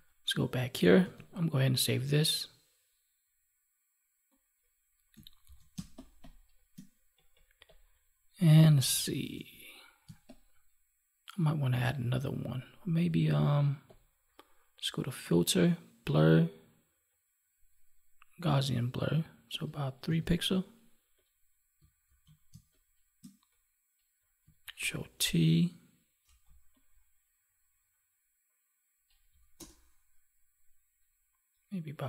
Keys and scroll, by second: 0.9 ctrl+s, 5.4 ctrl+d, 5.6 space, 9.2 ctrl+Tab, 10.0 space, 22.0 ctrl+s, 22.4 space, 24.7 ctrl+t.